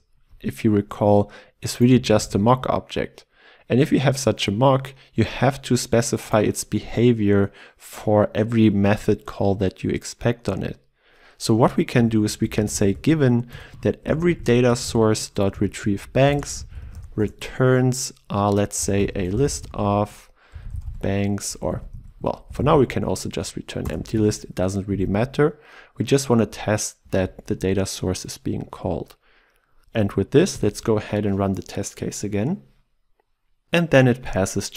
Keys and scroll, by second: 2.0 ctrl+alt+Left, 3.2 ctrl+w, 13.6 Return, 21.7 ctrl+w, 23.8 ctrl+w, 23.9 Return, 27.1 ctrl+s, 30.5 shift+F10.